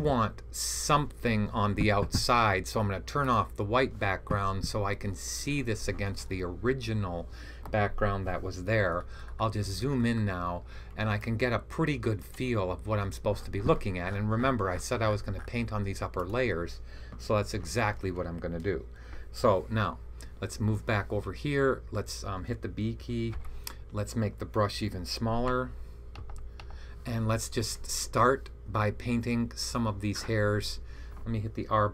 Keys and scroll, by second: 23.2 b, 26.1 [, 26.5 [.